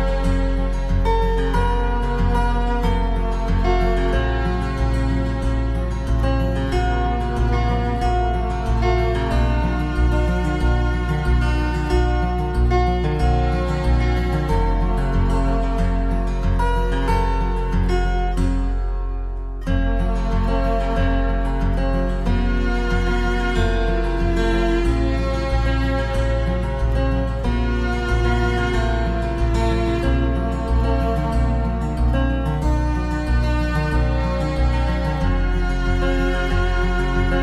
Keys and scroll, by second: 4.9 Delete, 14.9 ctrl+c, 15.1 ctrl+v, 34.5 ctrl+=.